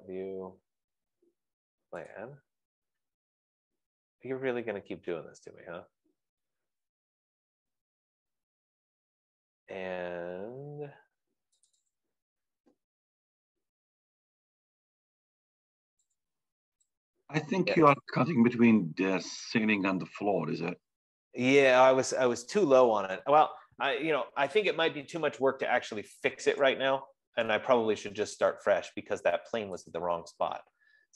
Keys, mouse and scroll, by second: 5.5-7.5 drag, 12.1-16.4 drag, 18.5 click, 22.5 Escape, 27.2-31.1 drag.